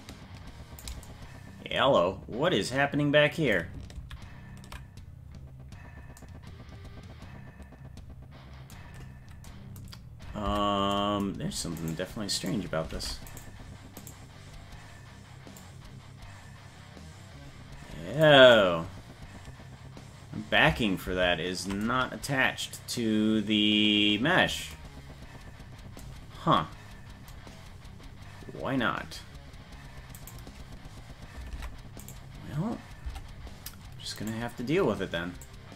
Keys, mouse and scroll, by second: 3.9 ctrl+z, 10.4 Tab, 11.8 right click, 12.4 right click, 12.9 ctrl+Tab, 13.3 right click, 14.0 right click, 15.5-18.2 drag, 21.1 ctrl+z, 30.3 right click, 31.6 ctrl+Tab, 32.1 right click, 33.1 Tab, 34.2 right click, 35.5-35.7 drag.